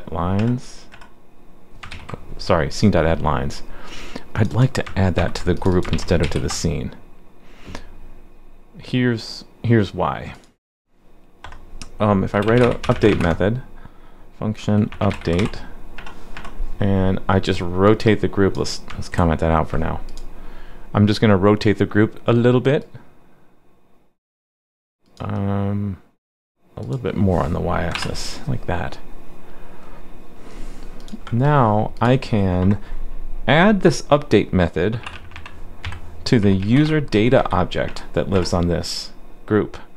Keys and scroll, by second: 1.9 super+s, 5.2 super+c, 5.9 super+v, 6.2 super+s, 19.1 super+/.